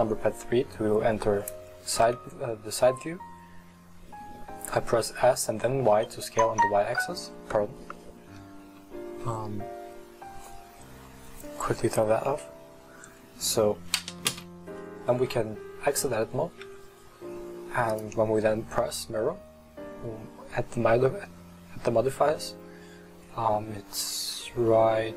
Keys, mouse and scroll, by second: 0.3-0.9 scroll up 3, 0.9-2.0 scroll down 2, 2.0 s, 15.4 middle click, 15.9 scroll down 1, 16.2 middle click, 16.7 Tab, 18.0-21.3 drag.